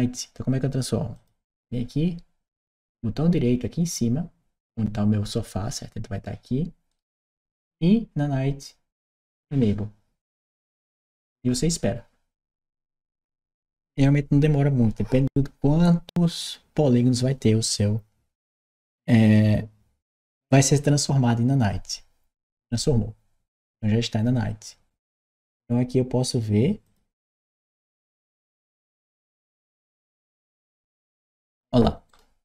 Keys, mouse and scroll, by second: 1.0 click, 6.7 right click, 10.4 click, 25.0 click, 26.7 click, 30.2 click, 31.9-32.4 right drag.